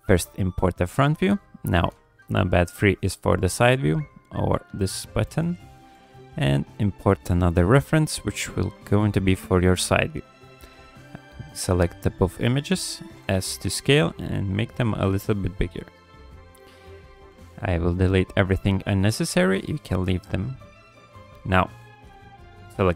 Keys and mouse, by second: 1.9 KP_3, 4.0 middle drag, 5.0 middle click, 5.7 shift+a, 10.2-10.8 middle drag, 11.9-13.2 middle drag, 13.2 s, 17.0 click, 17.3 x, 18.7 x, 21.2 click, 21.6-22.9 middle drag.